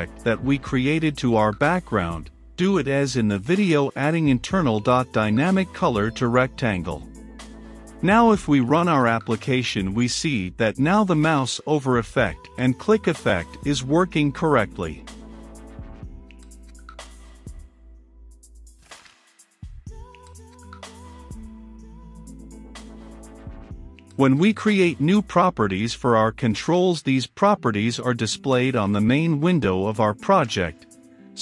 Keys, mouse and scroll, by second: 1.9-4.0 drag, 4.0-5.0 typing, 5.5 Return, 7.4-31.4 drag.